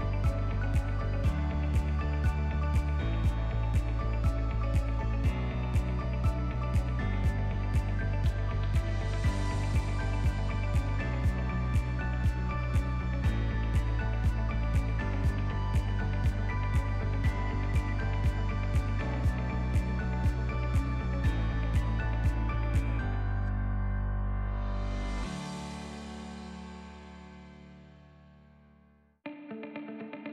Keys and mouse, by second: 0.5 s, 3.6 s, 5.7 e, 9.0 s, 11.1 shift+middle click, 11.9 e, 14.8-16.4 drag, 16.4 s, 19.2 e, 21.2-22.4 drag, 22.6 s, 24.7-26.4 drag, 26.6 middle click, 27.2 ctrl+middle click, 27.6 middle click, 28.7 middle click, 29.4 shift+middle click, 30.2 ctrl+r.